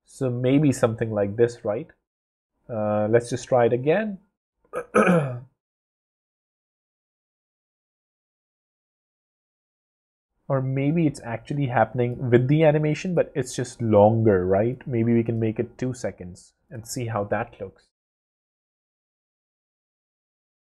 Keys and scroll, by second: 2.8 w, 16.8 w.